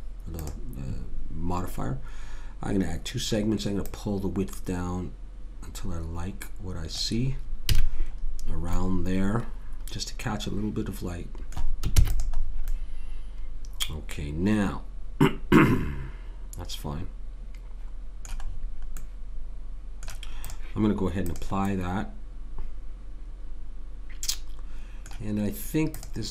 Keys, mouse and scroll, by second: 3.9 click, 7.7 a, 7.9-9.4 middle drag, 9.7 middle click, 12.0 ctrl+s, 18.4-20.4 middle drag, 20.4 click, 26.0 click.